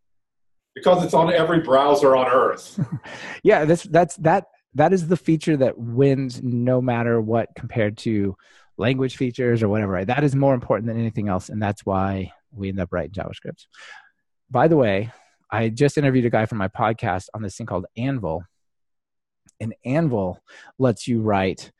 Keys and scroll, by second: 3.7 alt+super+l.